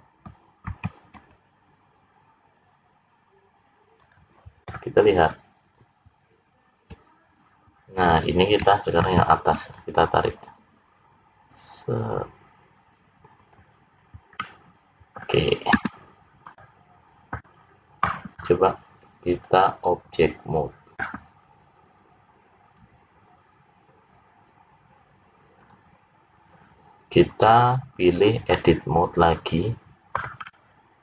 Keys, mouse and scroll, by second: 0.7 ctrl+r, 5.1 click, 5.7 click, 6.5-7.3 scroll down 4, 9.1 ctrl+r, 14.0 scroll down 3, 14.5 middle click, 17.5-18.0 scroll down 5, 19.3 click, 25.6 click, 27.3 click, 28.8-29.7 scroll up 1, 29.7 scroll down 2, 30.4 middle click.